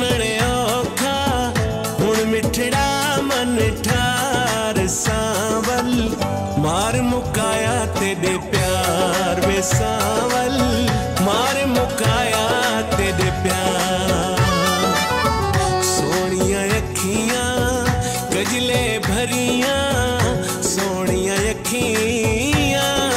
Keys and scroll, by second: 7.4 ctrl+s, 9.1 ctrl+s, 10.2 F4, 11.3 ctrl+s.